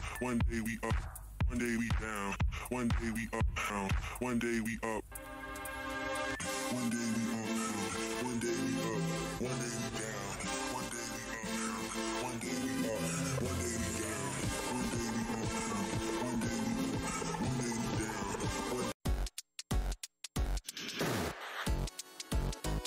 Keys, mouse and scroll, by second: 1.8 scroll down 1, 2.6 click, 4.9 Delete, 5.7 w, 8.8 Return, 9.8 alt+space, 10.3 space, 12.5 click, 12.9 alt+Tab, 14.9 Tab, 16.9 scroll down 1, 18.4-18.8 scroll down 1, 18.8 click.